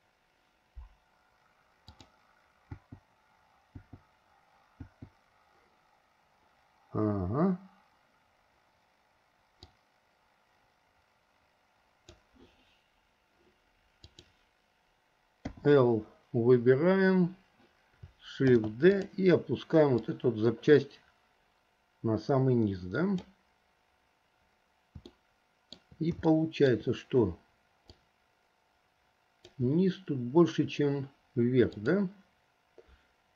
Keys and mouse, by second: 2.0 click, 2.9 l, 4.0 l, 5.0 l, 10.0-12.3 drag, 14.2 click, 15.7 l, 18.6 shift+d, 20.1-23.4 drag, 25.3 shift+middle click, 26.5 shift+middle click, 28.2-29.7 drag, 31.9 click.